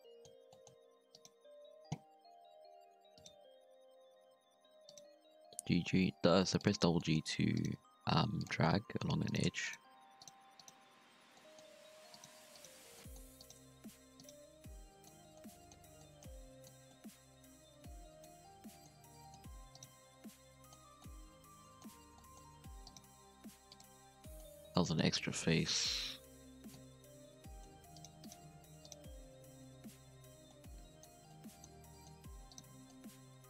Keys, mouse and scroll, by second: 0.0-1.1 middle drag, 1.1 right click, 2.2 v, 3.9 g, 5.1 g, 7.0-7.4 middle drag, 7.4 3, 7.5 right click, 7.8 x, 8.6-9.1 middle drag, 9.1 1, 9.2 right click, 9.6 shift+right click, 10.2 shift+right click, 10.6 shift+right click, 10.9 f, 11.3 middle click, 12.1 right click, 12.5 shift+right click, 12.9 middle click, 13.3 shift+right click, 13.7 f, 14.1 2, 14.2 right click, 14.4 f, 14.7 scroll down 1, 14.7 middle click, 15.1 Tab, 15.3-15.7 middle drag, 15.7 Tab, 15.9 middle drag, 16.2 scroll down 1, 16.4-16.7 middle drag, 16.7 Tab, 16.8-18.3 middle drag, 18.3-19.1 scroll up 3, 18.4 Tab, 18.6 middle click, 19.1 middle click, 19.5 1, 19.7 right click, 20.0 z, 20.2 middle click, 20.7 3, 20.9 middle click, 21.9 z, 22.1 middle click, 22.4-22.8 scroll up 2, 22.8 right click, 23.2 x, 23.9-24.8 scroll down 5, 24.0 middle click, 24.8-27.1 middle drag, 27.1 1, 27.4-27.9 middle drag, 27.9 shift+right click, 28.2 shift+right click, 28.8 shift+right click, 29.7 f, 30.3 Tab, 30.4-31.6 middle drag, 31.6 Tab, 31.9 middle click, 32.0 scroll up 1, 32.2 1, 32.4 right click, 32.7 middle click, 33.1 g.